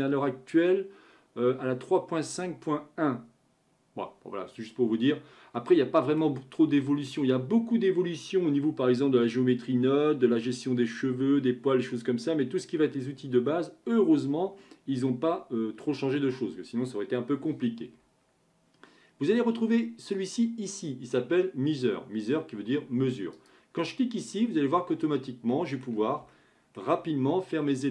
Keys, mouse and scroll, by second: 5.6-9.7 middle drag, 23.3-25.5 drag, 25.5-27.0 middle drag, 27.0-27.9 scroll up 4.